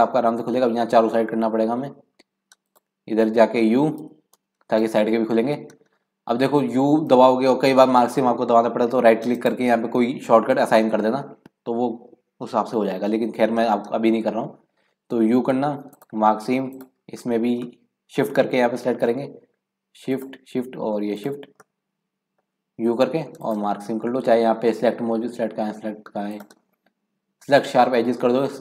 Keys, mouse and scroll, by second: 2.7 click, 4.0 u, 15.4 u, 16.7 click, 17.4-17.7 scroll down 1, 17.7-20.1 middle drag, 20.1 shift+click, 21.1 shift+click, 21.6-22.8 middle drag, 22.8 u, 26.3-28.6 drag.